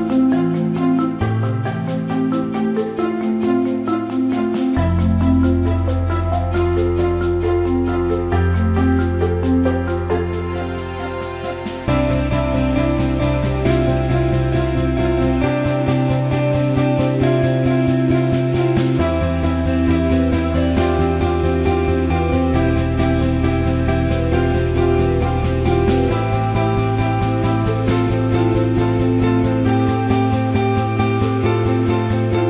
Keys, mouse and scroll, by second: 0.1 click, 0.7 click, 1.6 alt+middle click, 2.2 alt+middle click, 2.5 alt+shift+middle click, 2.7 alt+middle click, 3.1 alt+shift+middle click, 3.7 alt+middle click, 3.9 alt+shift+middle click, 5.0-6.6 alt+middle drag, 6.8 alt+shift+middle click, 9.7 alt+shift+middle click, 11.6 click, 12.0 Tab, 12.7 click, 13.6 click, 19.7 click, 20.1 click, 20.8 alt+shift+middle click, 22.2 shift+d, 24.4 s, 25.4 alt+shift+middle click, 25.9-28.7 drag, 29.5-30.5 drag.